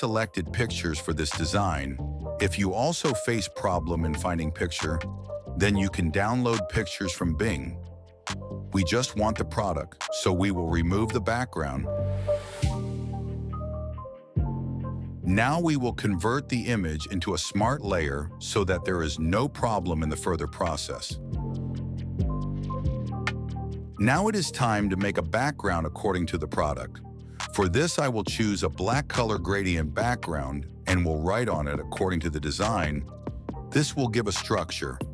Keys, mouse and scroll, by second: 0.6 click, 3.0 click, 4.0 click, 6.1-12.1 alt+shift+drag, 12.5 click, 13.1 alt+shift+click, 13.7 click, 14.4 click, 16.8 right click, 18.5 click, 19.3 right click, 20.6 click, 21.7 right click, 23.2 click, 23.9 click, 27.9 click, 28.9 click, 30.2 click, 31.7 s, 33.4-35.1 shift+drag.